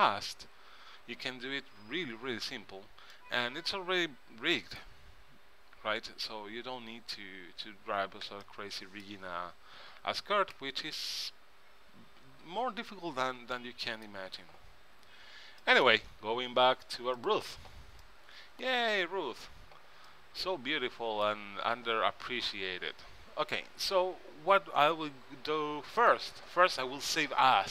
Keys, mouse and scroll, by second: 3.3 middle click, 3.3 click, 3.8-5.0 middle drag, 8.6-10.4 middle drag, 13.7-15.4 middle drag, 15.8 middle click, 17.3-18.9 middle drag, 18.9 click, 19.1 click, 19.2 click, 19.3 middle click, 20.2-22.0 middle drag, 26.1-27.7 drag.